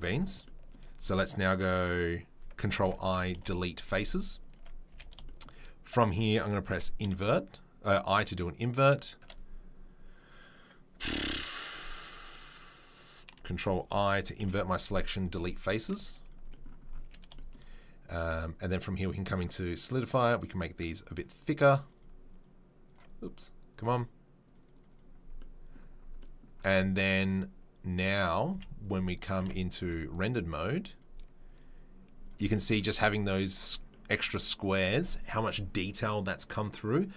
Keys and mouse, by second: 2.8 ctrl+i, 3.3 Delete, 4.9 a, 5.1 shift+right click, 5.5-7.1 drag, 6.7 i, 7.1-8.9 shift+right drag, 8.9-18.7 shift+middle drag, 14.3 Delete, 15.8 z, 17.0 a, 18.7-21.7 drag, 21.7 middle click, 21.8 click, 21.8 middle click, 21.9 click, 22.1 middle click, 22.4-23.7 drag, 23.7 middle click, 24.4-31.7 drag, 31.7-32.2 middle drag, 32.2-33.1 drag, 33.1-37.1 middle drag.